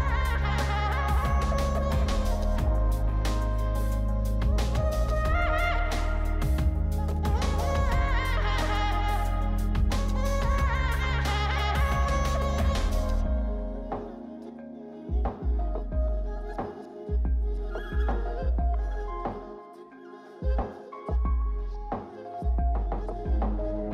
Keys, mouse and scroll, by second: 2.3 double click, 5.2 scroll up 2, 6.2 scroll down 2, 7.2-7.8 Escape, 8.9-10.1 scroll down 1, 10.1 scroll down 1, 10.1 scroll up 2, 11.3-11.8 scroll up 1, 11.8 scroll down 1, 11.8 scroll up 2, 13.1-13.4 scroll up 2, 13.4-14.3 scroll down 4, 14.3 scroll up 3, 15.0-15.4 scroll down 3, 15.4 scroll up 3, 16.4 scroll down 3, 17.1 scroll up 3, 17.9 scroll down 3, 20.7 1, 20.8 Return, 22.4 5.